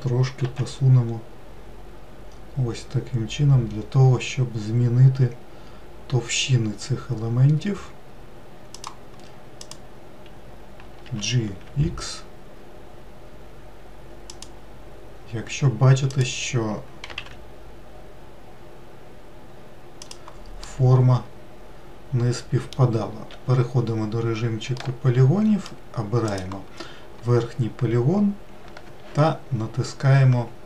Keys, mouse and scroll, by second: 9.5 click, 10.9 g, 15.9 click, 16.9 g, 20.5-23.2 middle drag, 23.2 3, 23.9 scroll up 1, 24.6-26.2 middle drag, 26.2 click.